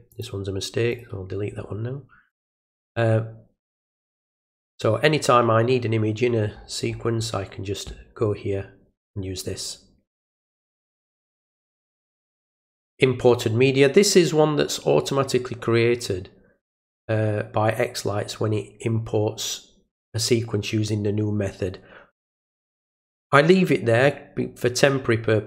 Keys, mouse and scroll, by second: 0.1 click, 0.9 right click, 2.3 click, 4.0 middle click, 4.0-6.5 scroll down 2, 6.5-7.2 scroll up 1, 10.7 click, 12.6 click, 12.8 click, 16.6 click.